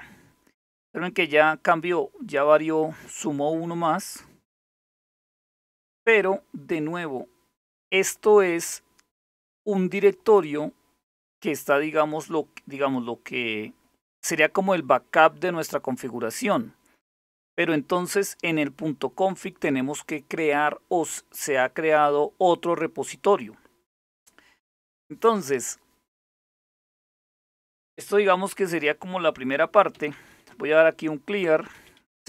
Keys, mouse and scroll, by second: 3.7-5.2 scroll down 2, 5.2 click, 29.3-32.2 typing.